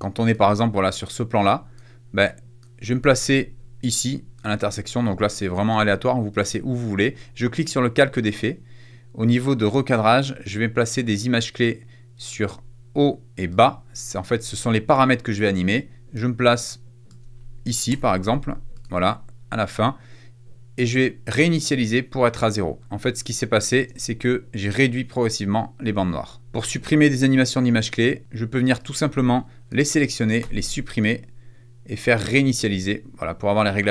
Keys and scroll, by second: 17.8 shift+Left, 22.8 space, 23.9 space, 30.4 BackSpace.